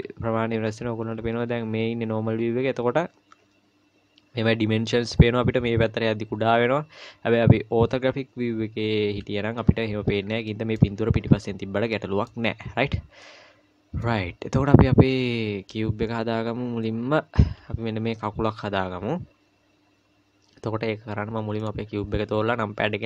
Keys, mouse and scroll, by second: 0.7 KP_1, 1.3 KP_5, 9.1 KP_5, 10.2 scroll down 2, 10.5 middle click, 11.9 middle click, 12.4-13.1 scroll up 1, 13.2 middle click, 13.2 scroll up 2, 21.6 click, 22.9 KP_1.